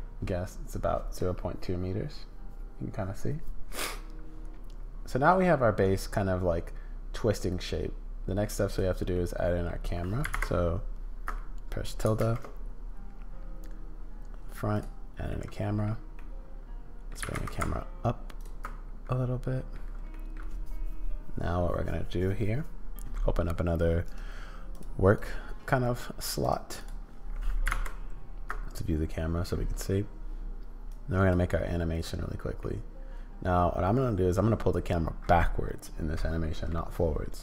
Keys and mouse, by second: 0.2-5.3 middle drag, 1.2 click, 1.2 right click, 3.9 click, 3.9 right click, 5.8-8.4 middle drag, 9.1 middle click, 12.2 shift+a, 15.3 middle click, 16.1 middle click, 17.2 g, 18.6-19.7 middle drag, 20.1 middle click, 24.2-25.3 drag, 26.5 click, 30.9 click, 32.6-34.7 middle drag, 34.7-36.7 drag.